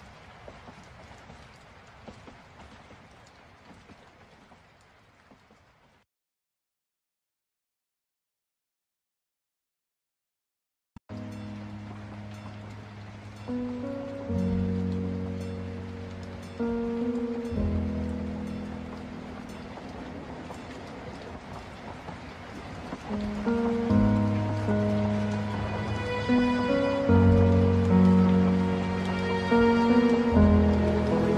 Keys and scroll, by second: 8.7 ctrl+z, 24.0 ctrl+alt+space.